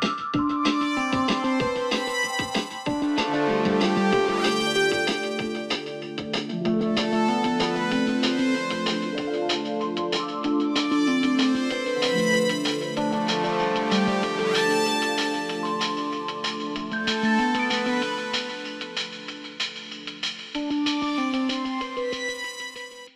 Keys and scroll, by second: 14.6 ctrl+s, 17.4 ctrl+d.